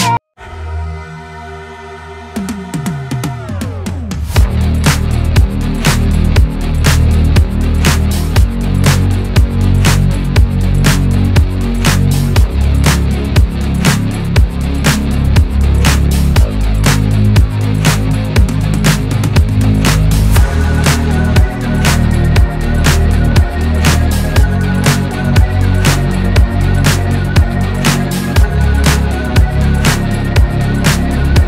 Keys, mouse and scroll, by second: 0.0 click, 0.4 KP_1, 0.7 KP_3, 0.8-1.2 scroll up 1, 1.2 shift+middle click, 1.9 click, 2.8 Tab, 3.3 g, 5.0 shift+middle click, 5.3 Tab, 5.7 click, 6.1 s, 10.1-10.6 scroll down 2, 10.2 shift+middle click, 10.6 shift+middle click, 10.9 scroll up 1, 11.2 Tab, 11.4 Tab, 11.9 click, 12.1 Tab, 12.7 scroll down 1, 12.8 shift+middle click, 13.2 a, 13.3 a, 13.6 right click, 14.4 scroll up 1, 14.6 click, 15.0 scroll down 2, 15.2 s, 15.7 g, 17.2-17.8 scroll up 2, 17.6 click, 17.8 shift+middle click, 18.4 r, 18.9 g, 19.9 click, 20.1 g, 21.5 r, 22.2 g, 23.3 click, 23.9 s, 24.5 r, 25.9 click, 26.2 g, 26.7 click, 27.0 r, 27.5 g, 29.2 click, 29.3 g, 29.9-31.3 middle drag, 31.3 KP_3.